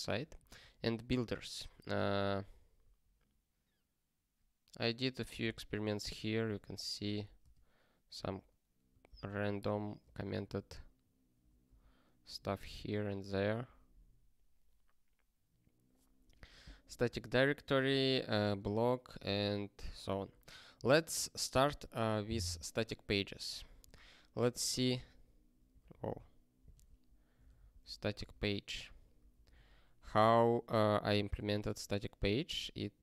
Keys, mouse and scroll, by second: 0.3 ctrl+n, 0.5 ctrl+n, 2.1 ctrl+p, 2.8 ctrl+a, 6.4 click, 6.7 ctrl+a, 7.0 ctrl+p, 7.4 ctrl+space, 8.2 ctrl+e, 9.1 ctrl+w, 9.6 ctrl+a, 10.0 ctrl+space, 10.2 ctrl+n, 11.7 ctrl+w, 12.4 ctrl+s, 17.6 click, 17.9 ctrl+a, 18.3 ctrl+space, 19.2 ctrl+g, 20.2 ctrl+p, 20.7 ctrl+n, 23.6 click, 24.9 alt+., 25.7 super+w, 27.1-27.9 typing, 29.1 Return, 29.5 ctrl+s, 32.8 click.